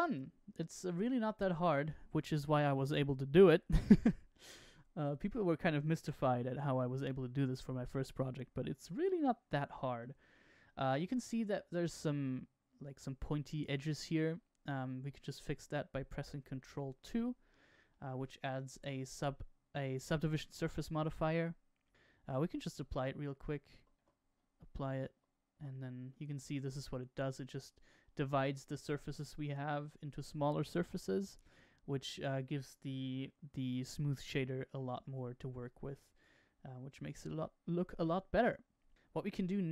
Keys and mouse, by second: 0.9 shift+middle drag, 1.9-3.3 middle drag, 3.9 KP_Decimal, 4.7-5.8 middle drag, 8.1-9.9 middle drag, 15.1-15.5 shift+middle drag, 16.9 ctrl+2, 17.8-18.8 middle drag, 22.7 click, 23.9 Tab, 24.8 click, 25.5 Tab, 26.0-27.9 middle drag, 28.3-29.4 middle drag, 29.8 middle click, 30.7-32.0 middle drag, 37.3 middle click, 39.3-39.7 middle drag.